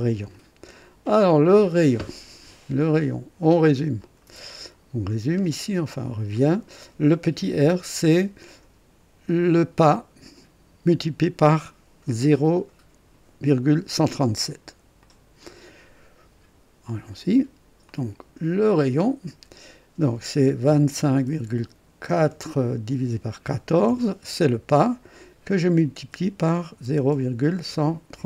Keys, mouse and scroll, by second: 0.0 click, 4.0 click, 5.2 scroll up 1, 15.0 click, 17.8 click, 18.6 click, 20.6 KP_2, 20.9 KP_5, 21.2 KP_Decimal, 22.1 KP_4, 23.0 KP_Divide, 23.4 KP_1, 23.8 KP_4, 26.0 KP_Multiply, 26.8-28.2 typing.